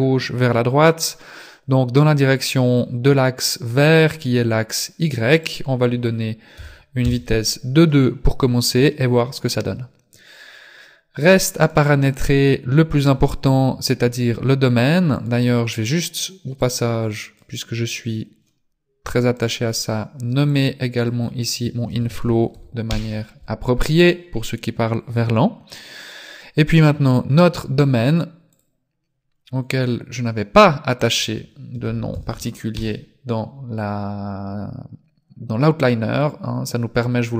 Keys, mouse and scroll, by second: 5.4 click, 9.8-11.7 scroll down 2, 11.7 right click, 15.2 right click, 16.7 click, 19.4 right click, 20.5 click, 21.0 click, 26.1 right click, 28.5 click, 29.3 scroll down 4, 29.6-30.3 scroll up 4, 30.3-31.0 scroll down 2, 31.0 click, 35.8 click.